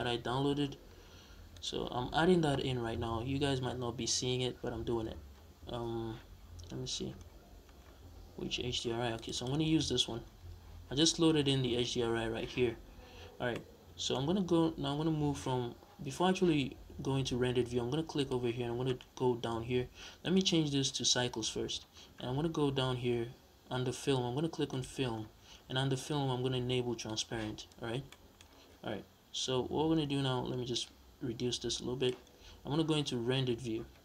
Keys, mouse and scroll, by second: 9.2 click, 10.0 scroll down 1, 10.2-12.4 scroll up 1, 12.6 scroll down 1, 12.8-13.3 scroll up 1, 13.3-17.9 middle drag, 17.9 click, 18.4-19.0 scroll down 1, 20.0-24.7 drag, 21.8 scroll down 1, 24.9 scroll down 1, 26.9 click, 27.5-27.9 scroll up 1, 27.9-30.5 middle drag, 28.3-28.9 scroll down 2, 28.9-29.8 scroll down 1, 29.8-30.4 scroll down 1, 30.4 scroll down 1, 30.5-34.0 drag, 32.5 z.